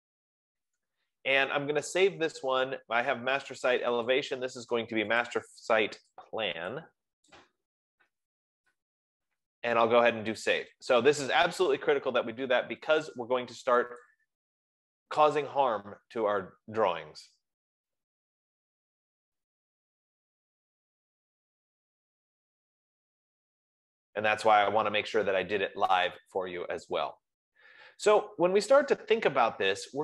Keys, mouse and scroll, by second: 4.8 click, 5.7 click, 6.5 click, 7.7 click, 8.2-10.2 typing, 12.0 click, 12.6 typing, 14.7 F15, 14.7 click.